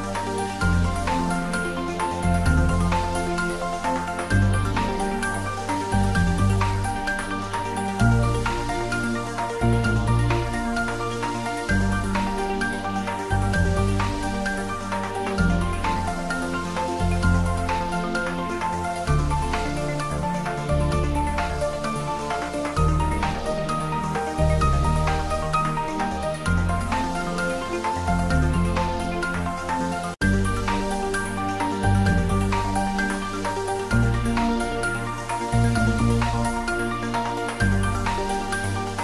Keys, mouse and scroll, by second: 0.4 click, 2.0 click, 4.4 click, 5.7 click, 7.5 Tab, 8.9-9.9 scroll up 1, 10.5 Tab, 11.4 click, 11.6 Tab, 12.9 a, 14.4 a, 17.5 a, 18.7 s, 21.1 click, 22.4-23.4 scroll down 1, 23.4 g, 24.9 click, 25.5 s, 27.4 click, 28.2 g, 29.9 click, 30.9 Tab, 35.9 Tab, 36.6-37.0 scroll down 1.